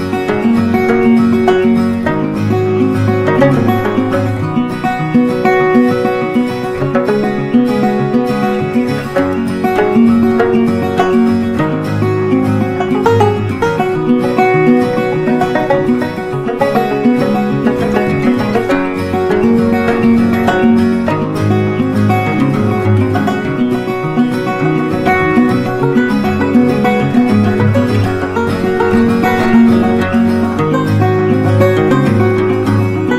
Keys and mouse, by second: 2.4 Right, 5.5-7.6 drag, 7.6 Left, 12.4-15.9 drag, 18.5 right click, 19.8 click, 20.5-25.4 drag, 25.4-33.1 drag.